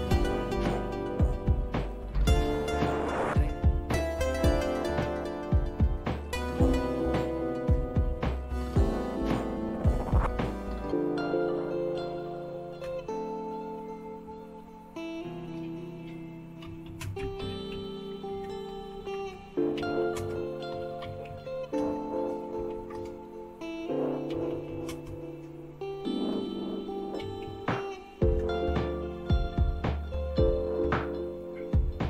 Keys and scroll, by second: 2.6 alt+super+r, 5.7 End, 6.2-7.2 Down, 7.6-8.3 Down, 8.8 Down, 9.1 Down, 9.4 Down, 9.7 Down, 11.1 Down, 11.4 Down, 11.9 Down, 12.8 Return, 16.4-25.1 typing, 18.2 Return, 26.3-28.3 typing.